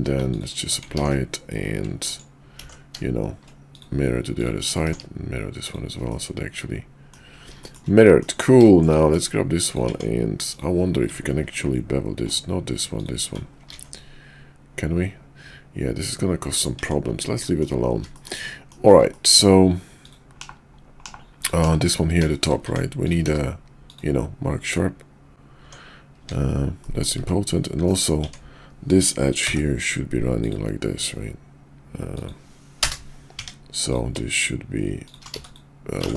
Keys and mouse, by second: 2.1 right click, 2.6 alt+x, 3.8-4.8 drag, 4.9 alt+x, 5.7 click, 6.1-7.1 middle drag, 7.6 shift+middle click, 7.9-8.2 middle drag, 8.6 shift+middle drag, 9.0 middle click, 9.9 Tab, 11.4 ctrl+b, 13.7 ctrl+b, 16.8 Tab, 17.4 middle drag, 18.1 shift+middle click, 18.5 middle drag, 21.0 /, 21.4-22.0 drag, 22.3 shift+middle click, 22.7 Tab, 23.3 q, 25.6 Tab, 26.8 middle click, 27.2 `, 27.8 KP_5, 28.2 Tab, 29.4 k, 33.4 Tab, 33.8 click, 34.2 shift+click, 35.3 x, 36.0 ctrl+z.